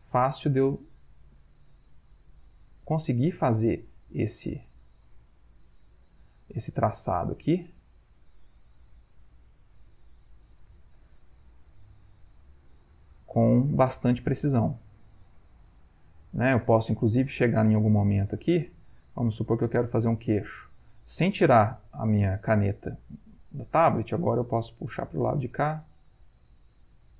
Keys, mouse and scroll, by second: 8.4-11.7 drag, 11.7 ctrl+middle click, 16.3-27.1 drag.